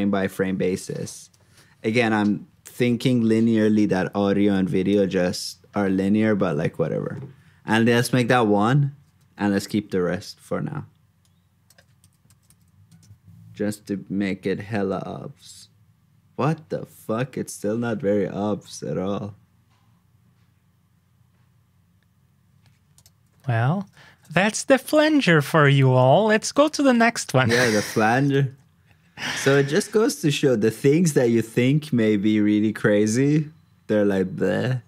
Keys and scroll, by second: 12.0 super+c, 12.2 super+j, 24.1 super+j, 27.2 alt+shift+Down, 28.5 super+Tab.